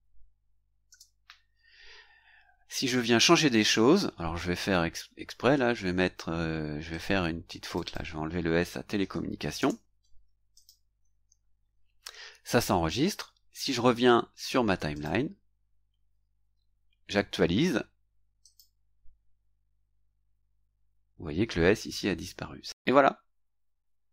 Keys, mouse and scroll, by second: 0.0-0.2 typing, 0.9 Return, 6.9 click, 7.6 click, 9.5 BackSpace, 10.5 click, 14.9 click, 18.4 click.